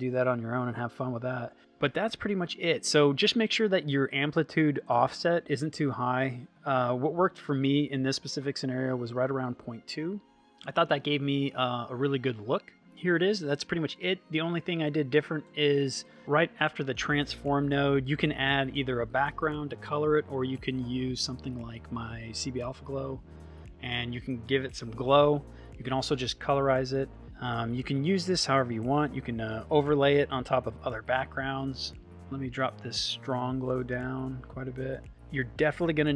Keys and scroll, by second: 7.4 ., 9.1 Return, 18.3 shift+space, 20.7 c, 21.0 b, 21.9 a, 22.6 Return.